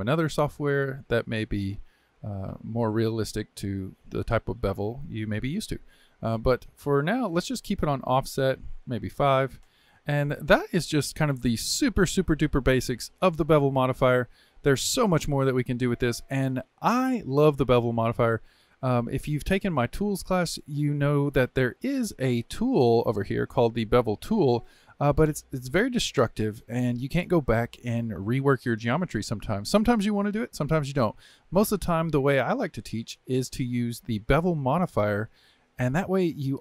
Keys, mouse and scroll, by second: 0.3-3.4 drag, 8.9-10.0 drag, 10.0-22.2 shift+middle drag, 22.2 Tab, 31.1 Tab, 32.2-35.3 middle drag, 36.0-36.6 middle drag.